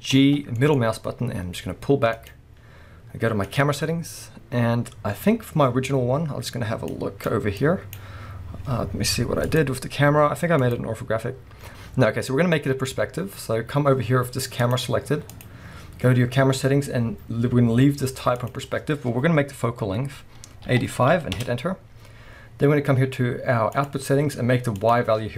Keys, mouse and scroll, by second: 0.2 g, 2.3 click, 3.5 click, 12.0 scroll up 1, 14.6 click, 15.4 click, 18.4-23.9 drag, 21.4 Return, 24.8-25.3 drag.